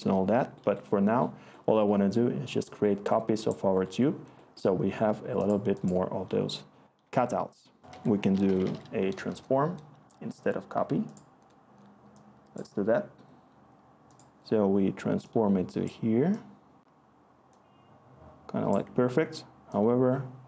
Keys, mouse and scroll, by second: 7.8 Tab, 8.1-9.2 typing.